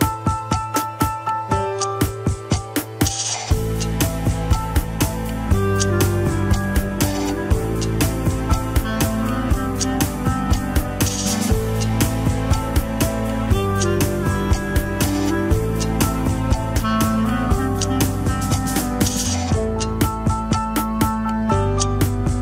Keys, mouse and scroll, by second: 0.3-0.8 scroll down 2, 0.8 click, 1.7 alt+z, 2.7 ctrl+click, 2.8 alt+z, 3.2-4.8 middle drag, 4.8 click, 5.2 middle click, 5.8-6.9 drag, 6.9 alt+z, 7.3 alt+z, 7.4 middle click, 8.1 click, 8.8 alt+z, 9.7 ctrl+click, 9.7 alt+z, 10.1 middle click, 10.6 click, 10.9 middle click, 11.8 scroll down 3, 11.9 KP_1, 12.2 ctrl+Tab, 13.5 ctrl+s, 13.7 click, 14.4 ctrl+Tab, 15.0-15.4 drag, 15.6 r, 18.2-19.2 scroll up 6, 18.2 shift+middle click, 19.2 r.